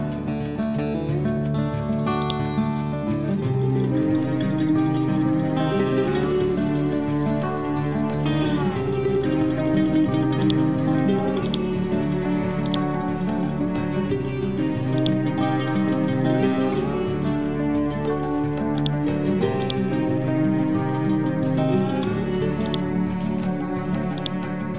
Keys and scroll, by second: 13.3 Down.